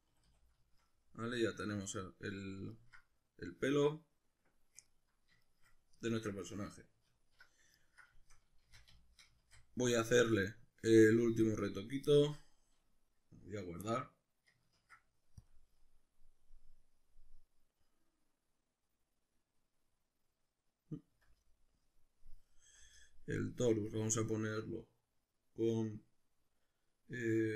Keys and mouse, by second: 0.1 a, 7.1 alt+q, 8.7 shift+c, 9.5 shift+a, 12.1 shift+middle click, 14.8 ctrl+s, 21.1 F9.